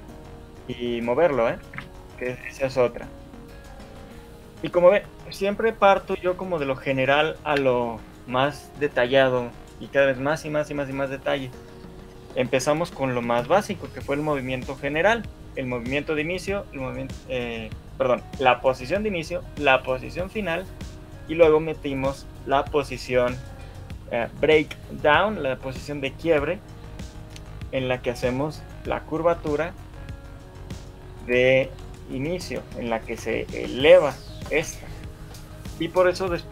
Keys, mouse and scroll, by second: 13.9 shift+middle click, 13.9 scroll down 2, 30.5 scroll down 4, 30.7 shift+scroll up 1, 31.1 KP_1, 31.9 shift+middle click, 33.1 right click, 34.7 scroll down 3.